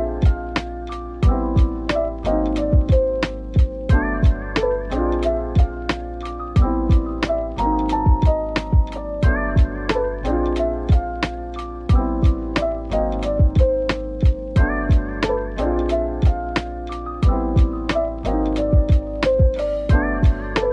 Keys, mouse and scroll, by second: 1.1-2.1 scroll down 1, 2.1 Tab, 3.1 shift+click, 4.0 ctrl+l, 6.1-7.0 typing, 8.3-9.3 typing, 11.4 double click, 11.9-12.7 typing, 13.1 scroll, 13.1 scroll down 1, 13.7 middle click, 14.8-16.2 scroll down 1, 16.2 middle click, 18.6-20.7 scroll up 1.